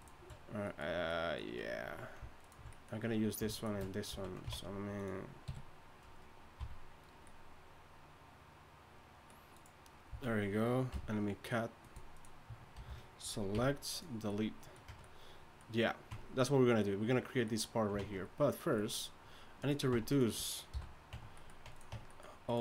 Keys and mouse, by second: 4.1 z, 4.5 ctrl+Tab, 5.4 KP_3, 6.6 c, 10.1 z, 10.9 v, 12.8 ctrl+l, 13.5 x, 14.9 Tab, 16.1 Tab, 18.0 ctrl+Tab, 19.9 Tab, 20.8 h, 21.1 Tab, 21.9 Tab.